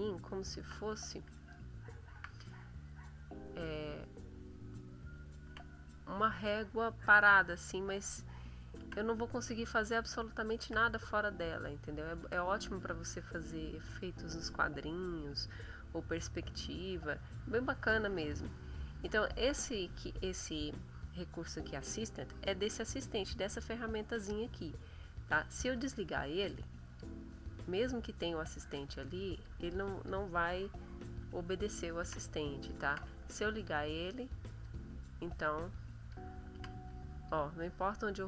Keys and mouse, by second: 0.6 ctrl+z, 1.5 shift+click, 2.5 shift+click, 3.4 click, 4.9 ctrl+z, 6.8 click, 8.8 ctrl+z, 9.7 click, 10.6 ctrl+z, 11.3 click, 12.2 ctrl+z, 25.7 click, 26.8 click, 28.2 click, 29.0 click, 29.7 click, 31.1 ctrl+z, 32.3 click, 32.8 ctrl+z, 33.5 click, 34.5 click, 35.5 click, 36.5 ctrl+z, 36.8 ctrl+click, 37.5 click.